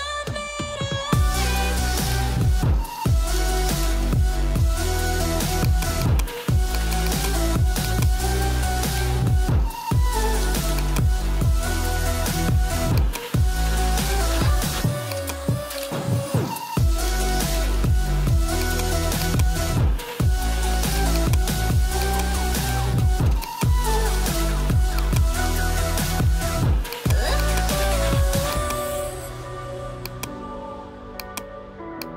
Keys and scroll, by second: 11.9 ctrl+g.